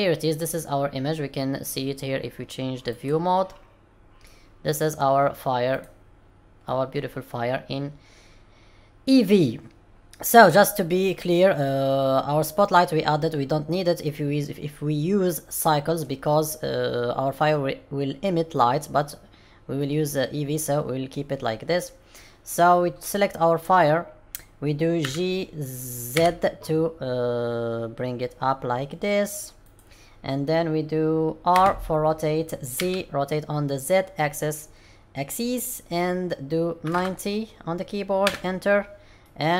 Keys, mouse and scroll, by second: 0.6 scroll down 2, 2.9 click, 4.1 middle click, 5.7 click, 6.6 middle click, 14.0 middle click, 18.5 middle click, 19.7 middle click, 25.0 g, 31.5 r, 39.1 middle click.